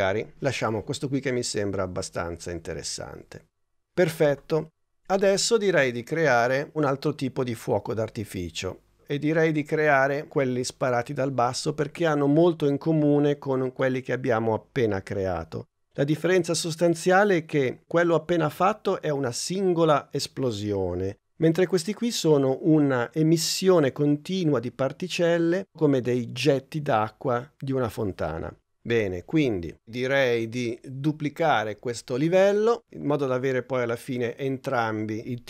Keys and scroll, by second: 5.0 super+Tab.